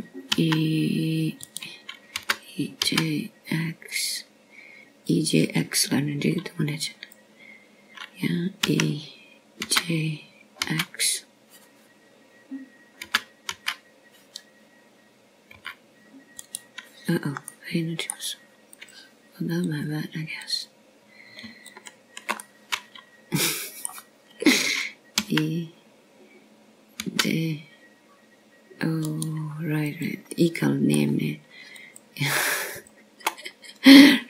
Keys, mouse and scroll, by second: 1.3 scroll down 1, 3.2 e, 5.1 g, 9.7 click, 11.5 e, 12.5 g, 13.6 x, 15.9 g, 16.5 x, 18.4 g, 19.3 right click, 20.4 middle click, 21.7 click, 22.5 click, 23.3 click, 24.5 shift+click, 25.3 middle click, 28.1 e, 32.7 click, 33.2 middle click.